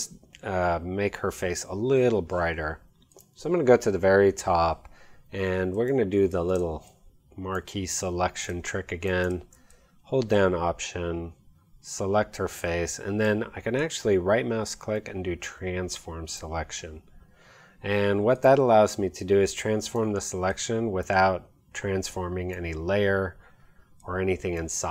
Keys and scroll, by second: 6.5 space.